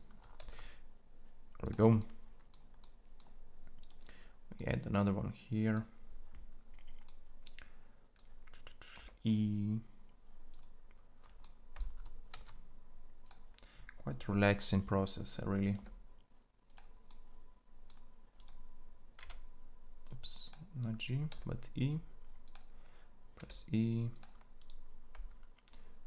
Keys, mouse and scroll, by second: 0.2 ctrl+a, 4.3-8.7 middle drag, 8.7 e, 12.1 ctrl+a, 15.6 e, 18.9 g, 21.1 e, 23.1 e.